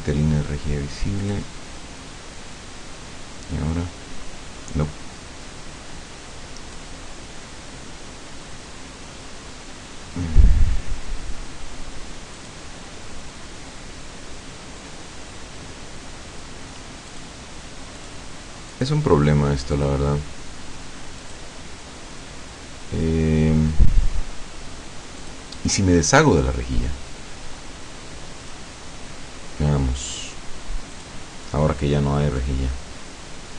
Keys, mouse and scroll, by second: 1.2 click, 3.6-7.0 drag, 12.4 click, 17.1 click, 18.0 click, 18.7 click, 19.8 click, 21.2 click, 25.2 click, 28.5 click, 31.0 click, 32.5-33.5 drag.